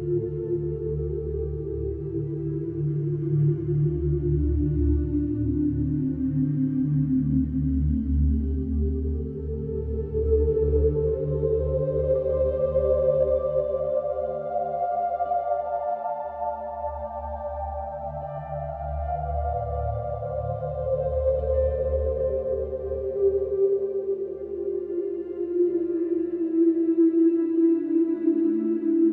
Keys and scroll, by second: 0.2 ctrl+d, 0.3 Escape, 5.0 3, 6.7 4, 9.0 2, 14.5 3, 16.8 4, 21.8 3, 23.8 ctrl+d, 23.9 Escape, 25.4 4.